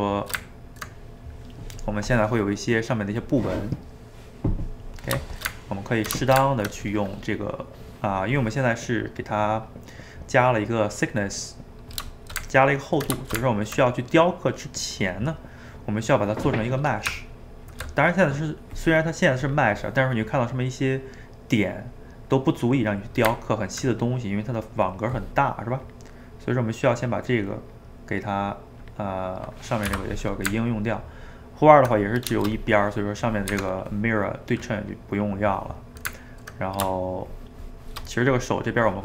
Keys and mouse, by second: 0.2 shift+right click, 0.5-3.6 ctrl+middle drag, 5.3-9.6 ctrl+shift+middle drag, 12.2-16.5 ctrl+shift+middle drag, 17.1 Tab, 19.4 click, 20.3-23.4 middle drag, 23.4-25.9 ctrl+middle drag, 25.9 click, 27.4-29.9 drag, 29.9 Escape, 30.3-33.5 ctrl+middle drag, 33.5 Tab, 34.9-36.3 drag, 36.3-38.4 ctrl+middle drag, 38.4 click.